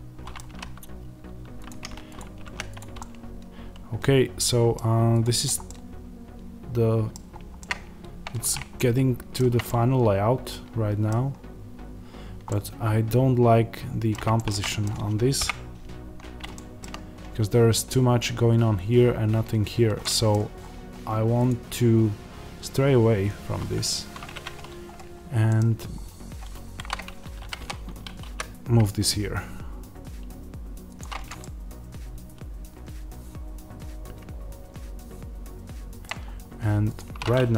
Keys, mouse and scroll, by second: 0.3 g, 1.6 click, 2.7 x, 2.9-5.1 middle drag, 5.1 click, 5.6-21.4 middle drag, 7.0-7.5 scroll down 2, 15.3 KP_0, 16.1-16.4 scroll up 2, 16.8-19.9 scroll down 3, 20.4-21.4 scroll up 2, 24.2-26.7 middle drag, 24.2-25.0 scroll up 2, 25.0-25.3 scroll down 2, 25.3-26.7 scroll up 2, 26.7 KP_7, 27.3 g, 30.9 click, 31.3-36.8 middle drag, 36.2-36.8 scroll, 36.8 click.